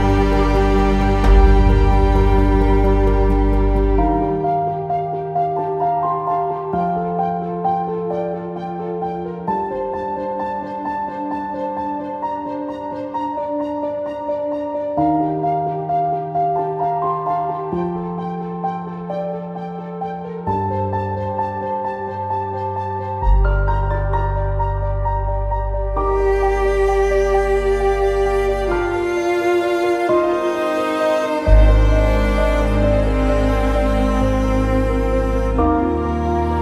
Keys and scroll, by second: 0.4 alt+x, 13.7 ctrl+z, 14.2 ctrl+c, 17.0 Escape, 17.6 q, 22.1 ctrl+z, 25.4 ctrl+z, 27.8 ctrl+c, 28.9 Escape, 29.3 ctrl+z.